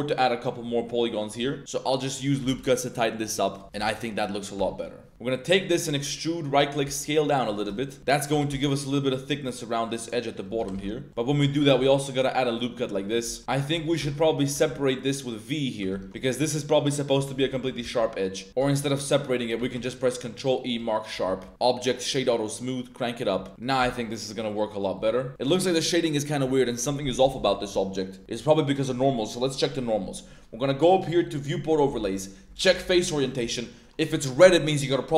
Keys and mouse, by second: 1.2 shift+click, 1.6 ctrl+r, 2.1 click, 2.5 ctrl+r, 3.6 shift+g, 3.9 Tab, 3.9 middle click, 4.5 Tab, 4.8 middle click, 5.1 1, 5.5 middle click, 5.8 e, 6.8 s, 7.4 click, 7.7 shift+middle click, 8.0 middle click, 8.3 g, 8.5 y, 8.9 click, 9.3 s, 10.3 click, 10.7 y, 11.1 Tab, 11.1 click, 11.6 ctrl+r, 13.0 click, 13.2 Tab, 13.4 alt+2, 13.8 alt+shift+click, 14.1 click, 14.5 v, 15.8 click, 15.9 Tab, 16.2 shift+middle drag, 16.7-17.1 middle drag, 17.2 shift+middle drag, 17.5 Tab, 17.8 z, 17.9-18.4 middle drag, 18.7 ctrl+z, 19.1 click, 19.7 ctrl+e, 21.1 Tab, 21.5 Tab, 21.5-22.2 drag, 23.1 click, 23.4 Tab, 23.5 a, 23.8 Tab, 23.9-24.3 middle drag, 25.0 Tab, 25.5 click, 25.8-26.3 middle drag, 26.5 middle drag, 26.9-27.2 middle drag, 27.7 middle click, 30.8-33.1 drag, 33.2 drag, 33.8 click.